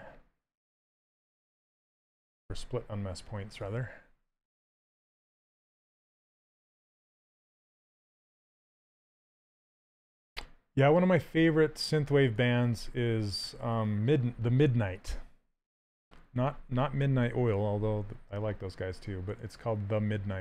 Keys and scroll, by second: 1.5 Down, 8.7 q, 10.0 s.